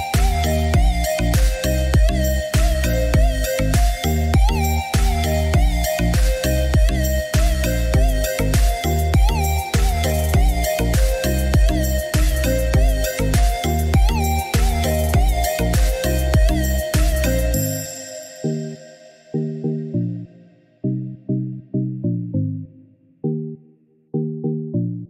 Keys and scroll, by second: 13.0 1, 13.3 0, 14.1 Return, 16.1 Escape.